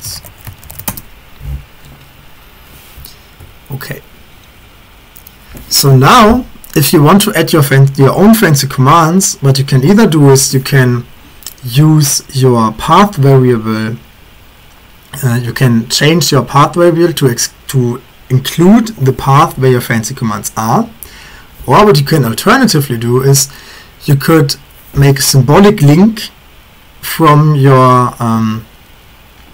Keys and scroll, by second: 0.0-1.4 typing.